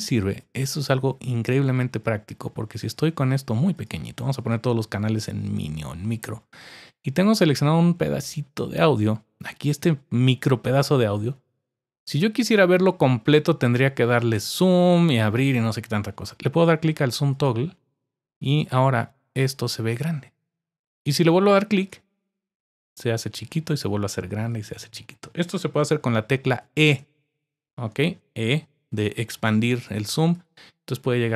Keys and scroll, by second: 25.8-26.9 typing, 28.7 typing, 29.8-30.3 typing.